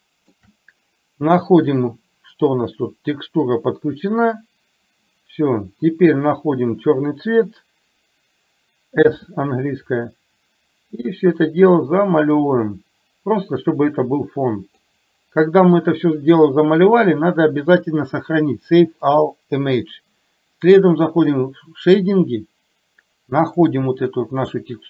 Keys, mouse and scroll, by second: 0.0 shift+middle click, 1.7 click, 9.1 s, 10.0-15.0 drag, 19.3 click.